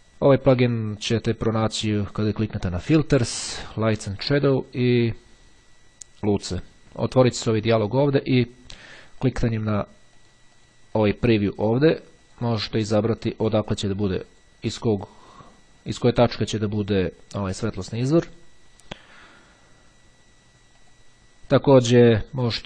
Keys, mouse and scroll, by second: 1.7-3.3 drag, 7.9-8.9 drag, 9.2-14.7 drag, 17.8-18.9 drag, 20.9 click, 21.7 click.